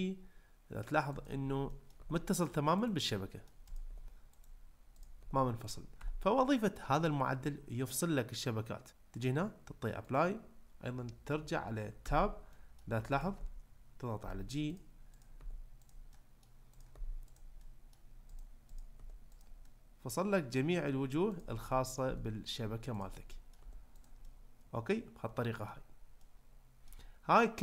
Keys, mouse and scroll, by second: 0.8-1.5 right drag, 1.7 middle click, 3.1-3.5 middle drag, 3.9 g, 4.4-4.9 right drag, 4.9 click, 5.2 g, 6.0 Tab, 9.3-10.1 drag, 12.0 Tab, 12.5 middle click, 14.2 g, 15.2 click, 15.4 g, 15.9 drag, 16.1 middle drag, 16.9 g, 17.3 click, 17.6-17.9 middle drag, 18.7 click, 18.9 g, 19.4 click, 19.6 middle click, 21.4 click, 21.7 middle click, 22.1 g, 22.5 click, 23.3 middle click, 23.6 g, 24.3-25.7 middle drag, 26.2 middle click.